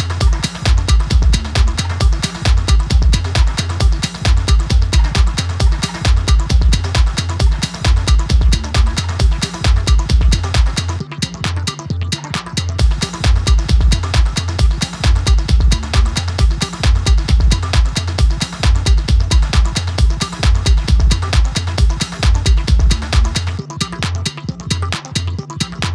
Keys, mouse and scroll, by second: 5.8 right click, 7.0 click, 7.2 right click, 8.5 click, 11.1-14.6 drag, 18.0 ctrl+s, 19.1 ctrl+F4, 20.2-21.2 alt+scroll up 2, 21.2 click, 23.4 click, 25.1-25.9 alt+scroll up 1.